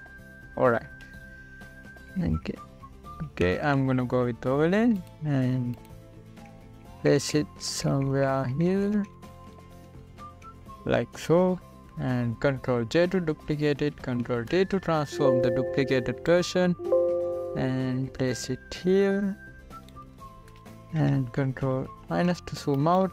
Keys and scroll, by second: 3.7 Up, 4.5 Down, 7.4 Up, 10.4 Down, 14.6 ctrl+j, 15.6 ctrl+t, 21.7 space, 22.9 ctrl+=.